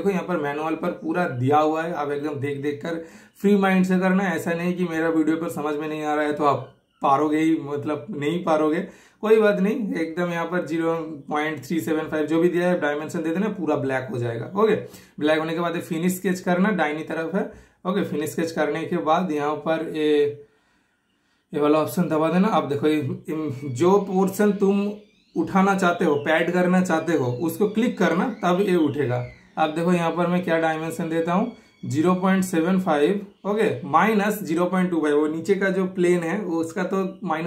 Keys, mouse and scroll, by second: 11.5-13.3 super+middle drag, 11.5-12.1 typing, 16.5 super+click, 18.6 super+click, 18.8 shift+super+middle click, 20.9 super+click, 23.3 super+click, 28.8 super+click, 29.0-30.0 super+drag, 35.2 super+Return, 35.7 super+middle click, 36.6-37.4 shift+super+middle drag.